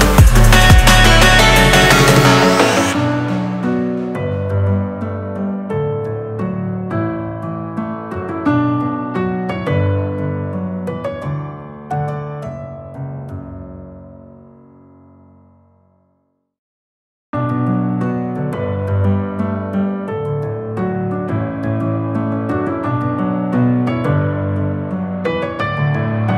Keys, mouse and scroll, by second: 6.2 w, 12.4 click, 18.2 ctrl+a, 20.5 click.